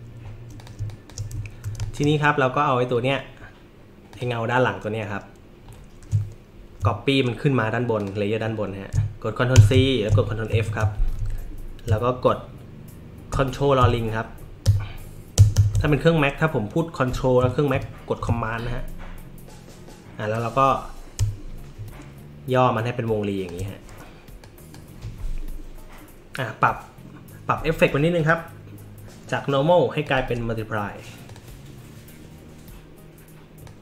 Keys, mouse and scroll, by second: 0.5 click, 0.7 space, 0.9 click, 1.4 scroll up 1, 1.8 space, 1.8 click, 4.1 click, 8.0 click, 9.5 ctrl+c, 10.5 ctrl+f, 13.8 ctrl+[, 14.6 ctrl+[, 15.3 ctrl+[, 15.5 ctrl+[, 17.7 ctrl+[, 20.3-23.4 drag, 24.4 drag, 28.2 click, 30.0 click, 31.3 click, 33.6-33.8 drag.